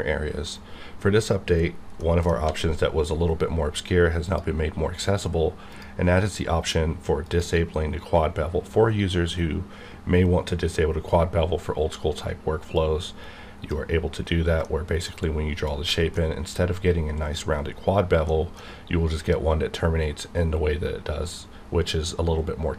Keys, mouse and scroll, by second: 0.4 right click, 2.0 middle click, 2.3 d, 4.1 click, 12.7-14.6 drag, 14.6 middle click, 16.1 middle click, 16.6-17.3 scroll up 1, 18.3 middle click.